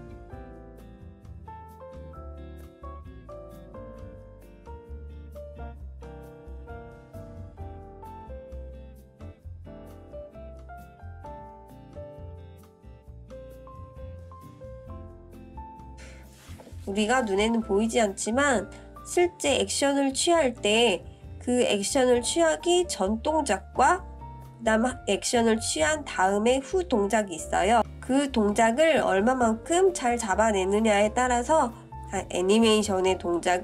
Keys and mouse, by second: 1.6 click, 4.0-8.2 drag, 9.1 click, 10.0-11.6 drag, 12.4-16.4 drag, 17.8-19.2 middle drag, 19.5-20.5 middle drag, 22.6 space, 26.0-26.6 middle drag, 29.5 space, 31.0-33.6 drag.